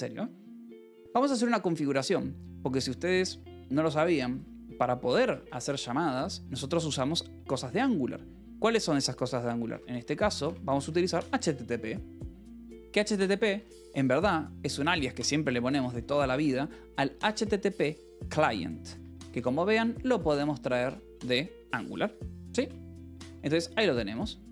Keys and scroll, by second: 0.9 j, 2.3-5.5 typing, 9.1-11.5 typing, 13.0 space, 14.0-16.7 typing, 18.3 Return, 18.8 Escape, 19.2 k, 20.8 shift+v, 21.9 Escape, 23.0 k, 23.9 j, 24.4 o.